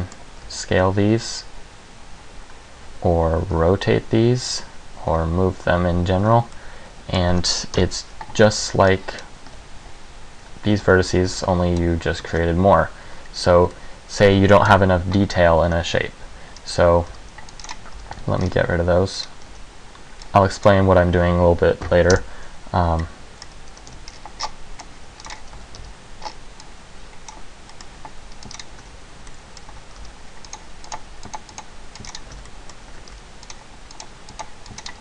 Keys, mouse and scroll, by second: 0.0 middle click, 0.6 s, 3.6 r, 5.3 g, 6.7 middle click, 7.9 KP_1, 8.7 a, 8.9 b, 9.7 g, 11.4 a, 11.4 b, 12.5 ctrl+r, 13.9 middle click, 14.8 KP_1, 16.7 scroll down 1, 17.2 c, 17.8 click, 18.1 c, 19.4 right click, 19.6 b, 22.0 Delete, 23.1 middle click, 24.0 c, 25.4 click, 25.5 f, 25.7 a, 25.9 c, 28.7 click, 28.8 f, 28.9 a, 29.4 middle click, 29.8 a, 30.1 c, 32.3 click, 32.4 f, 32.5 a, 32.7 middle click, 33.1 a, 33.3 c.